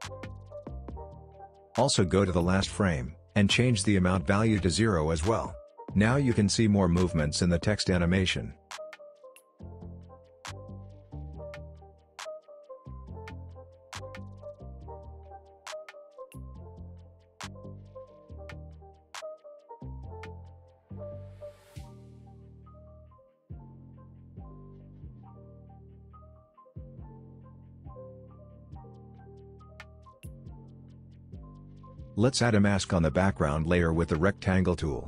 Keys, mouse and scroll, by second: 0.1 shift+click, 2.0 Return, 2.4 click, 3.1 Return, 3.4 click, 3.8 Return, 4.1 click, 4.9 u, 5.7 u, 6.0 click, 7.4 space, 9.1-14.8 drag, 23.1 click, 25.0-27.2 drag.